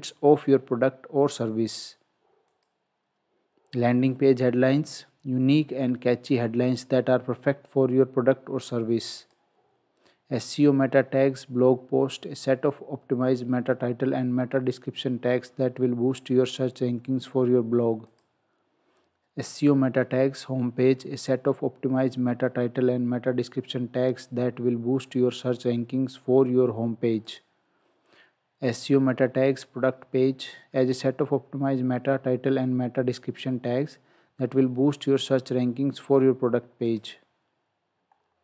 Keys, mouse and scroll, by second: 2.6 click, 9.2 click, 18.1 click, 27.3 click, 36.9 click, 38.1 scroll down 1.